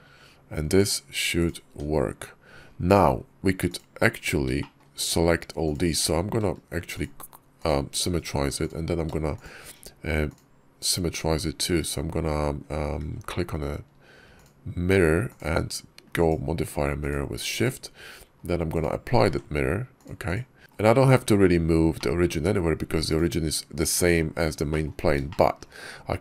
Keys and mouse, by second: 0.6 click, 1.2 click, 3.5 click, 4.4 shift+click, 5.5 click, 5.9 alt+x, 8.5 click, 9.2 shift+click, 10.1-11.6 drag, 13.0 alt+x, 16.1 shift+drag, 16.9 shift+click, 18.6 click, 19.3 ctrl+`, 20.6 KP_5, 21.8-22.4 drag, 23.0 click, 24.5 click, 24.6 middle click, 25.1 shift+middle click.